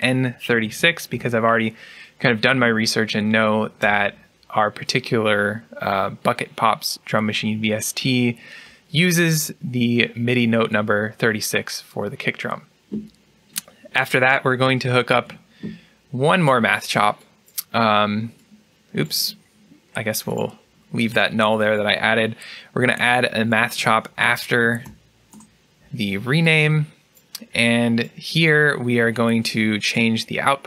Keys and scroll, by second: 3.4-4.1 typing, 15.0 alt+n.